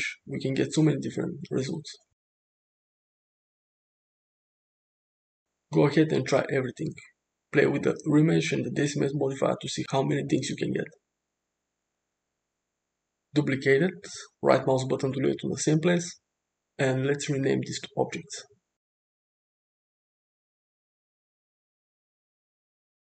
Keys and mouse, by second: 6.4-8.8 middle drag, 10.7 click, 11.7 click, 13.4 shift+d, 16.4 middle click, 16.5-23.0 middle drag.